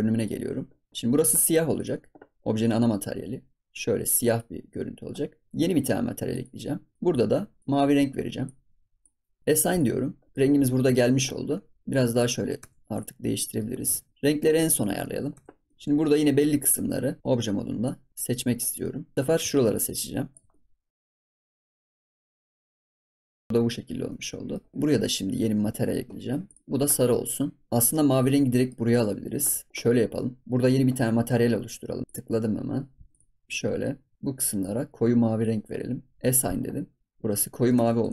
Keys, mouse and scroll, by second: 0.1 click, 0.8 scroll up 2, 1.7 click, 6.2-7.6 drag, 9.6 click, 10.2 scroll down 1, 10.3 middle click, 10.4 scroll up 2, 10.8-11.8 middle drag, 11.8 click, 12.5 Tab, 12.9 drag, 13.1 scroll down 3, 13.3-13.7 middle drag, 13.7 scroll up 2, 13.9 ctrl+s, 13.9 scroll down 1, 14.1 middle click, 14.1 scroll up 4, 14.4-14.7 scroll down 1, 14.7 click, 15.0 middle click, 15.3 Tab, 15.4-15.8 scroll up 5, 15.6 middle click, 17.2 click, 18.8 middle click, 19.7 shift+click, 20.5 middle click, 21.0 shift+click, 21.2 ctrl+s, 21.2 middle click, 21.7 shift+click, 22.0 ctrl+s, 22.1 middle click, 22.3 shift+click, 22.5 ctrl+s, 22.5 middle click, 22.8 shift+click, 23.1 ctrl+s, 23.2 middle click, 23.4 shift+click, 23.5 scroll up 7, 23.8 scroll down 4, 24.0 middle click, 25.2-27.3 drag, 27.3 scroll up 4, 27.6 scroll down 1, 27.9-32.0 middle drag, 32.0-33.1 drag, 36.2 click, 37.1 scroll down 1, 37.3 Tab, 37.5 middle click, 37.7 Tab, 38.0 ctrl+s.